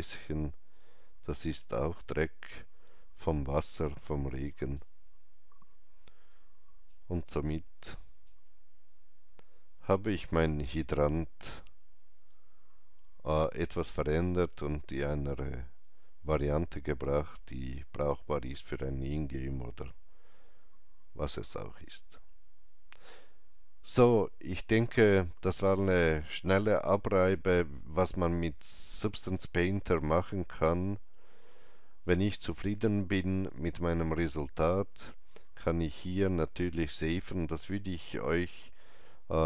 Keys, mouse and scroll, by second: 4.1 shift+right click, 6.2 shift+right click, 7.3 shift+right click, 8.4 alt+Right, 8.4-21.1 alt+drag, 30.4-34.5 alt+drag, 30.6 alt+Left, 35.5 alt+Left, 35.5-38.1 alt+drag.